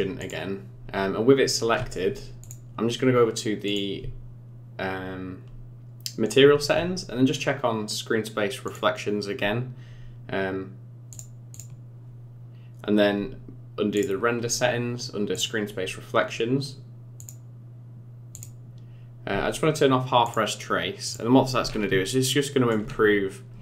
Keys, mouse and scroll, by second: 0.2 click, 2.4 click, 3.7 click, 6.2-8.7 scroll down 22, 8.7 click, 11.2 click, 11.5 click, 14.0 click, 14.4-15.3 scroll down 5, 15.3 click, 15.7-16.9 scroll down 2, 17.3 click, 18.3 click, 20.5 click, 21.1 click, 21.6 scroll up 5, 22.1 shift+middle click, 22.9-23.5 scroll up 2, 23.5-23.6 scroll down 8.